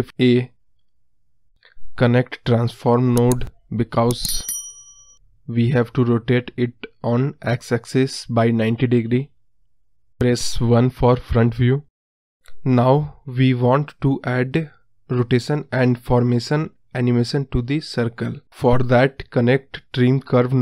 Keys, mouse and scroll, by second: 0.4 x, 3.2-7.7 drag, 11.1-12.3 drag, 12.3 KP_1, 12.5 scroll down 1, 12.6-14.8 scroll up 6.